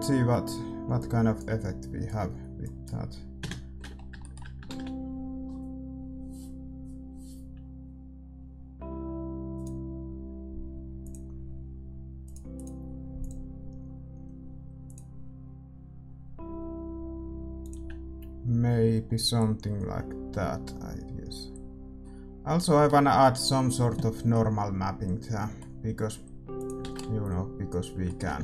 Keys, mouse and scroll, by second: 2.6 ctrl+s, 2.6-4.5 drag, 3.3 KP_0, 3.8-9.5 middle drag, 5.5 shift+z, 9.5-15.0 drag, 18.4-19.7 drag, 26.9-28.4 drag, 27.1 shift+z.